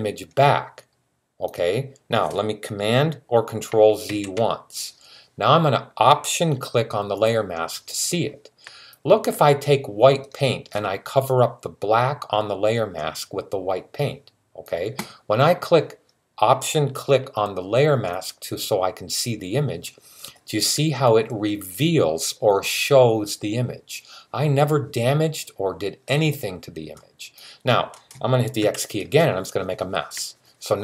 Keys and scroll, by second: 3.9 super+z, 28.4 x.